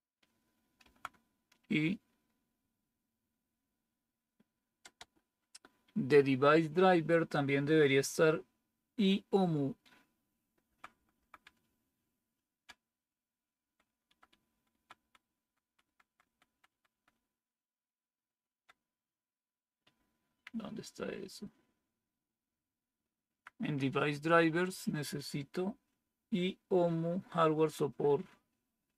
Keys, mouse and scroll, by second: 0.7 Right, 4.8 Return, 10.5 Down, 10.8 Down, 11.0 Down, 11.3 Down, 13.8 Down, 14.1 Down, 14.2 Down, 14.6 Down, 14.6 Down, 14.8-16.3 Down, 16.6 Down, 16.7 Down, 17.0-18.2 Down, 19.8 Down, 19.8-23.3 Up, 28.8 Down.